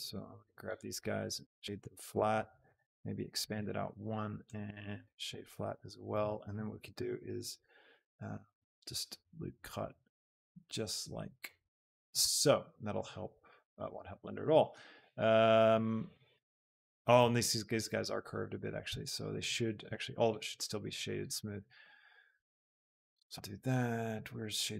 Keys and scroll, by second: 3.3 ctrl+KP_Add, 7.0 ctrl+r, 12.1 Tab, 19.1 shift+Tab, 19.8 a.